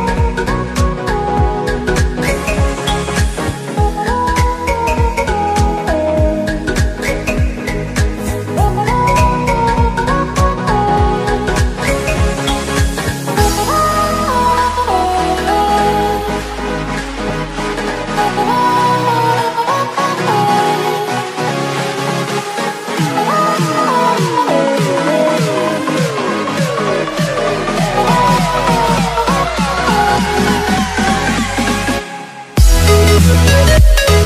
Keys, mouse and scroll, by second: 4.0 click, 9.3-9.7 scroll up 1, 11.8 click, 13.1-14.9 scroll down 1, 14.9 click, 16.1 Delete, 20.5 click, 25.4 click, 29.3 Delete.